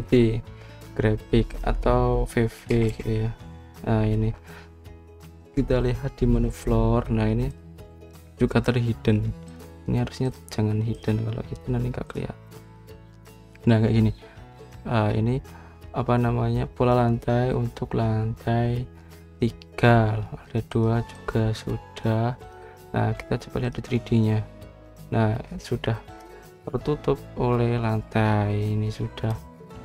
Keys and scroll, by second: 3.6 v, 3.8 v.